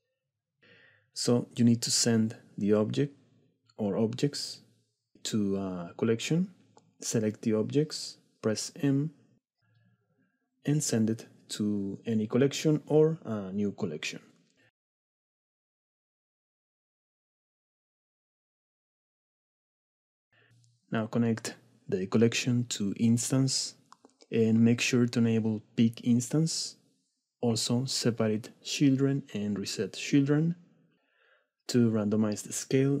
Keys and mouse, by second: 11.8 m, 12.9 m, 18.0 middle click, 18.9-19.4 drag, 19.8 middle drag, 21.3-24.2 drag, 28.9 click, 30.0 click, 32.2 middle click.